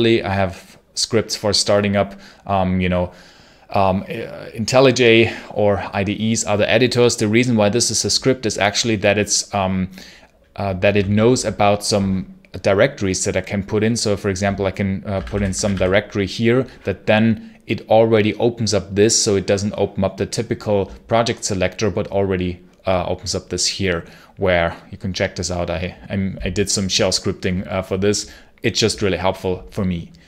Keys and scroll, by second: 14.7-16.1 typing.